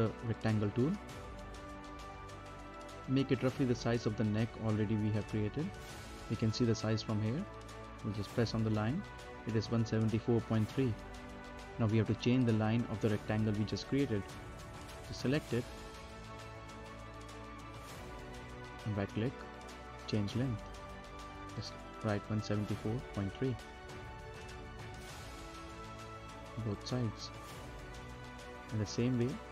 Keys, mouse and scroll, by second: 0.3-4.6 drag, 4.6-5.0 scroll down 1, 5.0 middle click, 5.5 scroll up 2, 5.9 middle click, 6.2-6.5 scroll down 1, 6.5-8.0 middle drag, 8.0 z, 9.0 click, 18.7 right click, 20.4 click, 21.5 typing, 22.6-23.4 typing, 25.6 click, 28.7 right click.